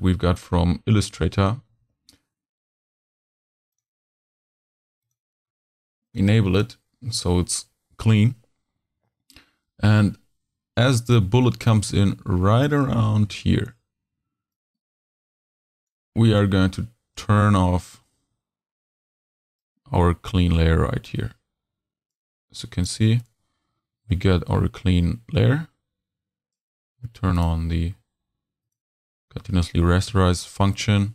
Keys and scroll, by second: 1.7 super+v.